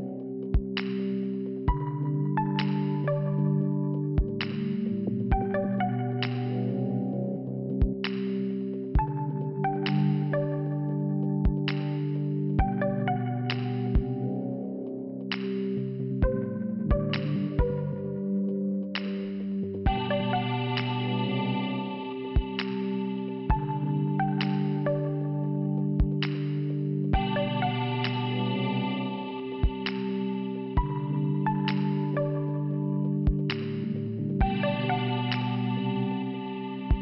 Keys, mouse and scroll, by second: 0.7 click, 0.8 click, 3.1 click, 3.8 click, 5.6 click, 5.7 click, 6.1 click, 6.8 double click, 6.9 double click, 8.9 click, 10.6 click, 11.0 click, 15.1 click, 16.0 click, 16.0 click, 16.1 click, 16.5 click, 16.6 click, 16.7 double click, 17.0 double click, 17.2 double click, 17.3 double click, 19.1 click, 19.2 click, 19.4 click, 19.9 click, 20.2 click, 21.3 click, 22.6 click, 22.7 click, 23.0 click, 23.1 click, 24.9 click, 25.0 click, 25.1 click, 25.2 click, 27.3 click, 29.0 click, 30.0 click, 30.0 click, 31.4 click, 31.5 click, 31.6 click, 31.6 click, 32.4 click, 32.5 click, 33.5 click, 33.5 click, 34.9 click, 35.0 click, 35.5 scroll down 1.